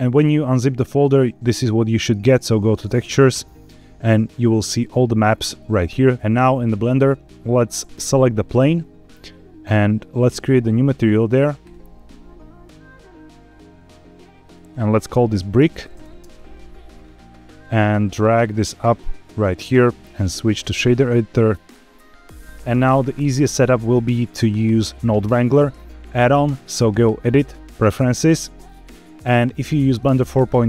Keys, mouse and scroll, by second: 7.2 scroll down 4, 7.8 click, 10.2 click, 11.5-13.7 drag, 14.3 click, 14.5-16.1 drag, 16.9 click, 17.8-19.3 drag, 19.4-21.4 drag, 26.9 click.